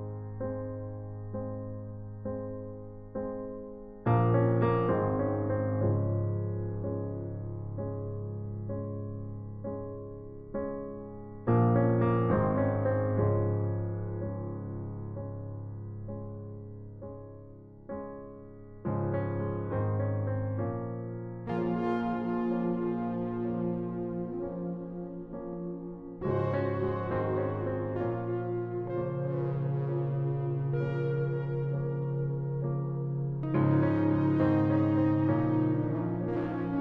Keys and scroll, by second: 10.2 ctrl+t, 19.9 Return, 32.8 ctrl+t, 36.7 space.